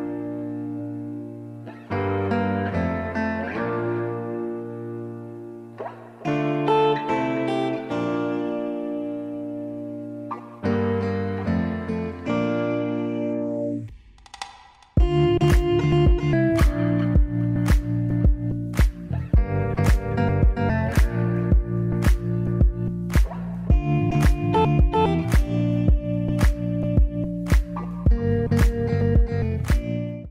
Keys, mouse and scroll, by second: 0.1 click, 0.4 shift+click, 0.6 click, 1.0 shift+click, 1.4 ctrl+j, 1.7 click, 4.3 middle click, 5.0-6.4 drag, 6.4 x, 11.9 click, 12.1 scroll down 1, 12.1 middle click, 12.3 alt+a, 12.3 scroll up 1, 12.5 middle drag, 12.8 click, 13.7-14.9 middle drag, 14.9 Return, 15.4 click, 15.9 click, 16.5 Return, 17.2-21.9 typing, 17.4 click, 17.7 Return, 18.4 click, 18.9 alt+g, 19.1 scroll up 1, 19.5 click, 19.7 scroll up 1, 21.1 ctrl+click, 21.1-21.5 middle drag, 22.3 click, 22.4-22.7 middle drag, 22.7 scroll up 1, 23.1 s, 23.5 middle click, 23.7 g, 24.1 middle click, 24.7 scroll down 1, 24.9 s, 25.5 g, 25.7-26.8 middle drag, 26.8 KP_7, 27.1 shift+middle drag, 27.3 g, 27.6 r, 28.0 g, 28.2 scroll down 1, 28.3 middle drag, 28.5 scroll up 1, 28.9-30.1 middle drag.